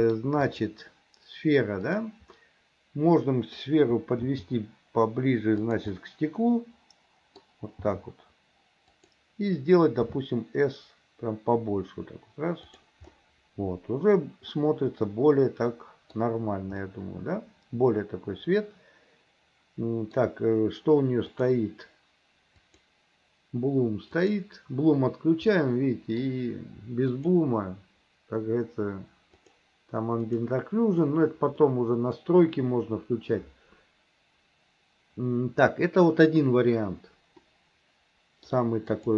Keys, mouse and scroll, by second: 0.6 click, 1.9 click, 2.4-3.6 middle drag, 6.0-7.5 middle drag, 13.1-16.2 middle drag, 16.8-20.2 middle drag, 22.7 click, 24.3-25.3 drag, 25.6 middle click, 27.3-30.6 drag, 31.7 middle click, 37.5-38.6 middle drag, 39.0 click.